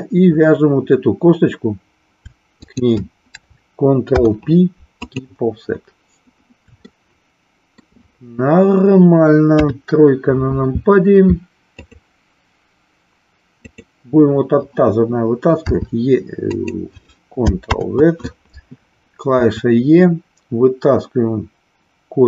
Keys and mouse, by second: 2.6 shift+click, 4.0 ctrl+p, 6.9 shift+middle click, 9.6 KP_3, 13.7 click, 15.7 r, 16.5 click, 17.7 ctrl+z, 19.4 e.